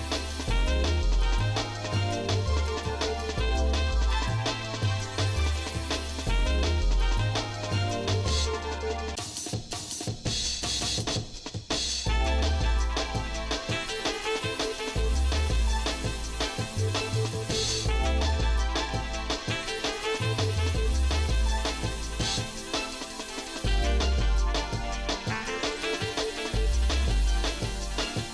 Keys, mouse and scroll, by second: 1.1 shift+middle click, 5.9 shift+middle click, 7.3 KP_7, 8.5 z, 9.8 middle click, 11.1 scroll down 1, 17.5 w, 21.2 w, 21.7 w, 22.9 w, 23.3 w, 27.1-28.3 ctrl+shift+right drag.